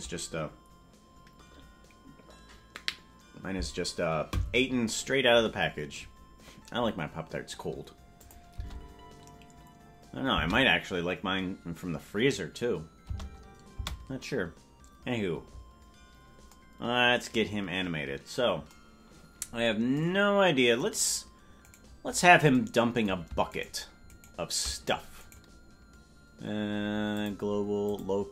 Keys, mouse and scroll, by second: 8.2 click, 8.7 space, 13.8 space, 21.7 right click, 23.6 shift+right click, 25.2-26.6 right drag, 27.1 click.